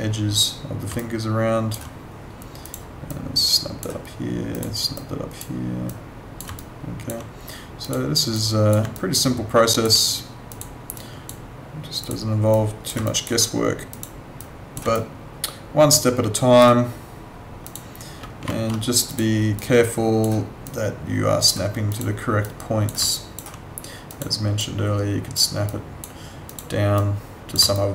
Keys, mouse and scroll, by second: 0.9 alt+click, 6.6 alt+click, 8.9 alt+click, 13.1 alt+click, 14.9 alt+click, 17.6 click, 18.4 z, 19.1 click, 23.1 alt+click, 27.7 alt+click.